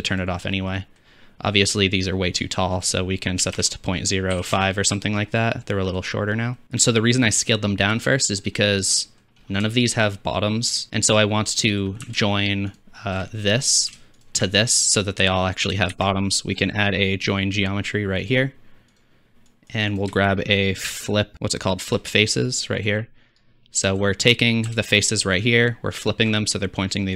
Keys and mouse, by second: 0.1-0.6 drag, 5.8-6.5 middle drag, 6.6-7.7 drag, 8.3-8.7 middle drag, 12.7 alt+shift+click, 14.2 alt+shift+click, 15.9 shift+a, 20.3 shift+a, 24.9 alt+shift+click, 24.9 alt+shift+middle click, 24.9 alt+shift+right click, 26.0 alt+shift+click.